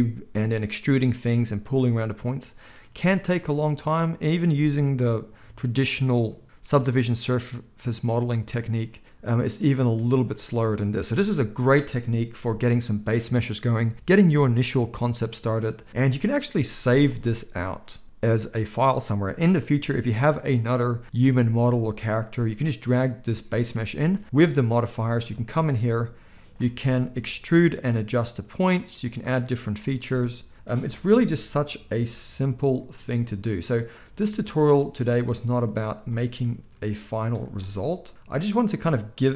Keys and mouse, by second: 7.7-16.1 middle drag, 12.3 KP_1, 16.1-17.1 drag, 17.1-26.3 middle drag, 25.2 Tab, 26.3-29.2 drag, 27.8 e, 29.2-39.3 middle drag, 29.9 ctrl+a, 31.0 KP_3, 32.9 g, 35.2 z, 36.7 r, 37.7 g.